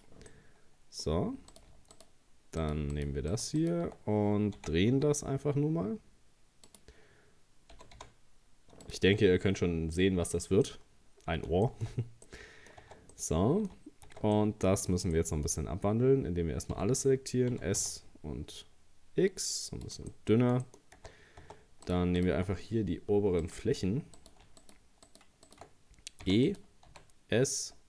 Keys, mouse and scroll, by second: 0.3-1.5 middle drag, 1.5 right click, 2.0 shift+right click, 2.6 shift+right click, 3.0 shift+right click, 3.3 shift+right click, 3.6 shift+right click, 4.6 r, 7.8 g, 9.3-9.7 scroll down 3, 9.7 scroll up 1, 10.7-12.0 middle drag, 12.0 scroll up 1, 12.3 middle click, 12.8 Tab, 13.1 middle click, 14.1 Tab, 14.4-16.7 middle drag, 16.7 a, 17.5 s, 20.1 middle click, 21.0 Tab, 21.4 Tab, 21.9 right click, 22.2 shift+right click, 23.4 click, 24.2 right click, 24.6 shift+right click, 25.1 shift+right click, 25.5 shift+right click, 26.3 e, 26.9 s.